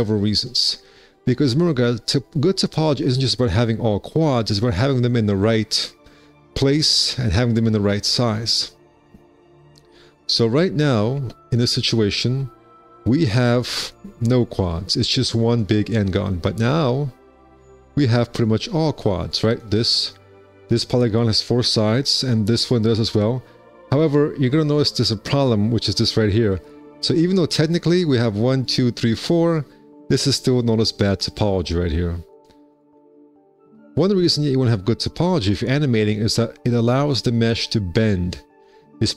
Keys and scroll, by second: 11.7 space, 12.1 `, 13.2 4, 16.1 4, 17.2 `, 17.7 4, 24.4 1, 25.2 w, 27.1 2, 27.4 q, 32.4 4.